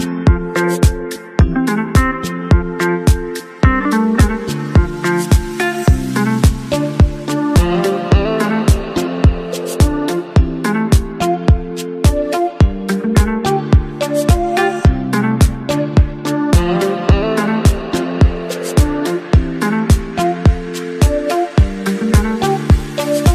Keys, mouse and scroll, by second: 7.7 v, 13.8 alt+click, 16.2 space, 17.8 ctrl+t, 22.3 Return.